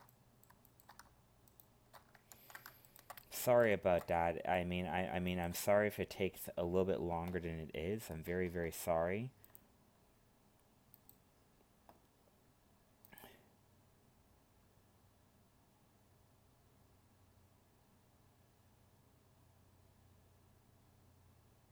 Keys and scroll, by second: 2.3 ctrl+z.